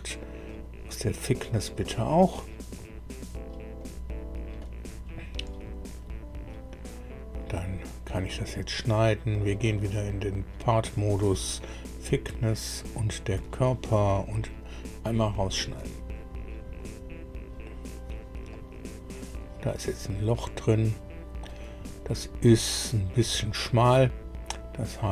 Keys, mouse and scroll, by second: 0.4 click, 3.7 click, 6.7 scroll down 1, 7.5 click, 9.5 click, 10.8 click, 12.7 ctrl+click, 15.1 click, 18.5-21.5 drag, 22.2-22.5 scroll up 1, 24.9 click.